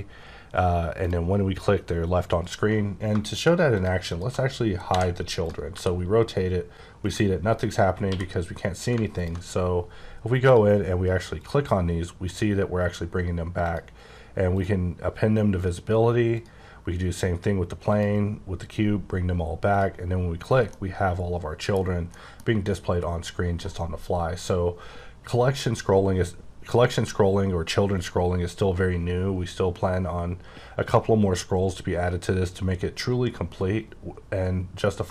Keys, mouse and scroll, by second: 1.0 click, 2.4 click, 3.2 shift+click, 3.7 shift+click, 4.1 shift+click, 4.9 h, 5.1 scroll down 1, 5.3 click, 5.7 r, 7.0 right click, 7.9 q, 9.0 ctrl+click, 11.4 click, 12.2 click, 13.6 click, 14.5 click, 16.3 click, 17.9 click, 19.7 click, 20.6 middle click, 22.1 middle click.